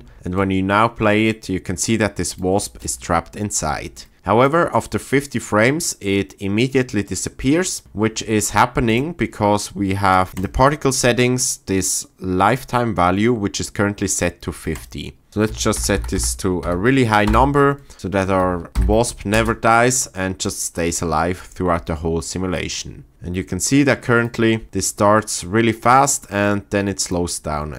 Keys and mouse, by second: 2.6 space, 4.4 click, 8.8 click, 10.3 click, 14.7-17.3 drag, 15.9 KP_0, 18.8 shift+Left, 19.3 space, 26.5 click.